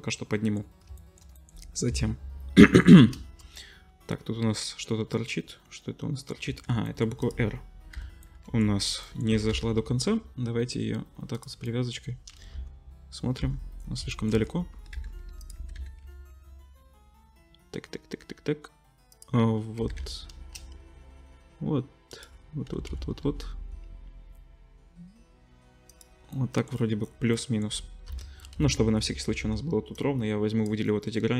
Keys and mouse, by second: 1.9 KP_7, 5.6-12.5 drag, 6.5 Tab, 7.2 middle click, 7.2 right click, 7.9 l, 9.3 g, 12.5 ctrl+KP_7, 14.8 g, 15.5 g, 18.7-22.2 ctrl+drag, 19.8 g, 22.2-29.9 ctrl+middle drag, 22.7 g, 28.1 KP_7, 28.5 z, 29.4 1, 29.9-31.3 drag.